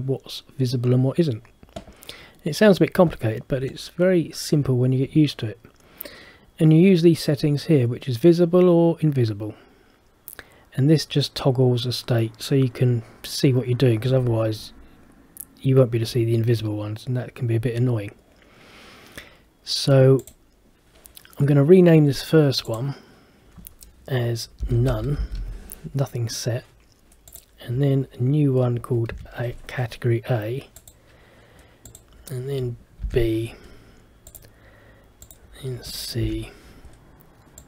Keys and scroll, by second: 24.7 shift+n, 29.2 shift+a, 33.1 shift+b, 36.3 shift+c.